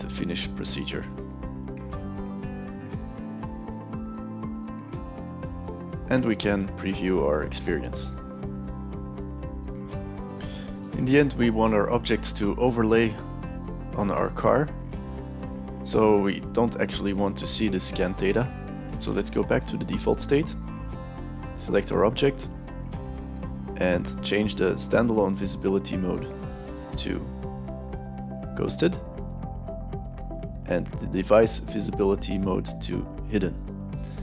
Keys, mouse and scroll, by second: 1.2 click, 3.6 click, 8.2 click, 8.9 alt+click, 9.0 alt+middle click, 9.0 alt+click, 9.2 alt+click, 11.8-12.6 alt+right drag, 13.2 alt+right drag, 13.5 alt+drag, 13.9 alt+right click, 14.3 alt+right click, 14.8 alt+drag, 19.7 click, 21.1 click, 26.3 click, 28.8 click, 30.3 click, 33.4 click.